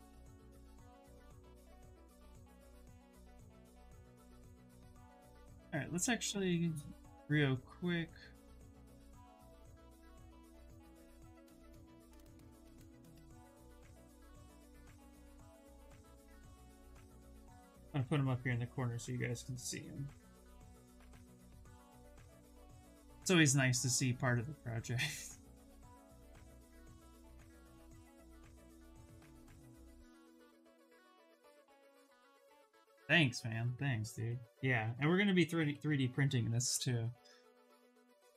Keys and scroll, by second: 1.6 s, 14.2 f, 15.8 f, 16.3 f, 21.1 shift+s, 30.0 s, 34.5 s, 35.5 s, 38.0 ctrl+z, 38.2 ctrl+z.